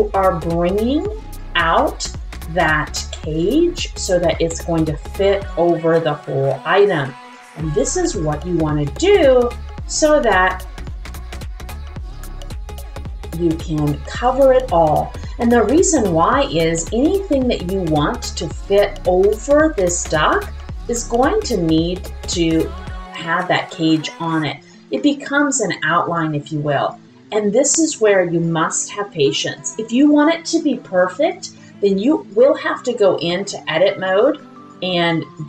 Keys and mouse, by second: 0.3 click, 0.9 click, 1.8 click, 3.3 click, 4.3 middle click, 5.5 click, 5.9 middle click, 6.8-8.3 drag, 8.9 click, 9.2 middle click, 10.8-12.8 drag, 13.8-14.8 drag, 15.2-18.2 drag, 18.6 click, 21.0 click, 21.4 click, 22.2-24.6 drag, 25.0 middle click, 26.3 click, 26.9-28.5 drag, 29.2 click, 30.2 click, 30.9 click, 31.6 click, 32.3 click, 33.2 middle click, 34.1 click, 34.7 click.